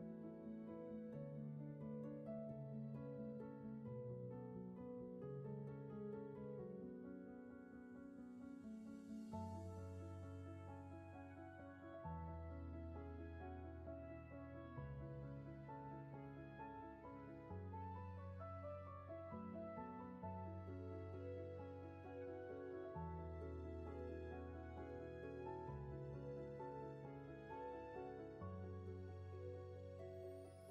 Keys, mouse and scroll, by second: 10.4 ctrl+z, 22.5-23.3 scroll up 1, 23.3 space, 24.9 scroll up 1, 25.7-28.3 scroll down 1, 28.3 scroll up 1, 30.4 space.